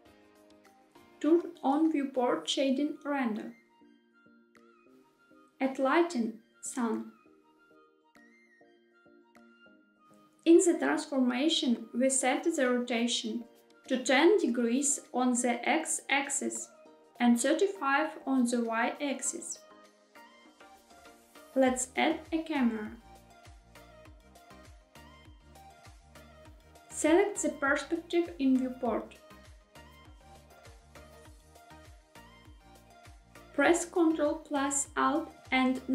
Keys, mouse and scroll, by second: 0.0 click, 2.0 click, 4.8 middle click, 5.0 shift+a, 10.5 click, 16.2 click, 22.2 shift+a, 27.6-28.0 scroll up 2, 29.2-33.0 middle drag, 35.7 ctrl+alt+KP_0.